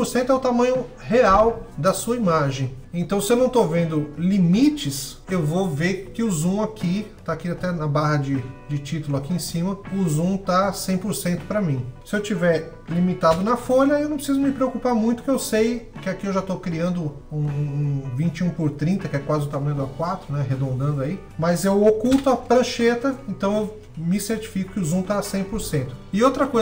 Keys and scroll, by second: 12.9 shift+super+h, 21.7 shift+super+h.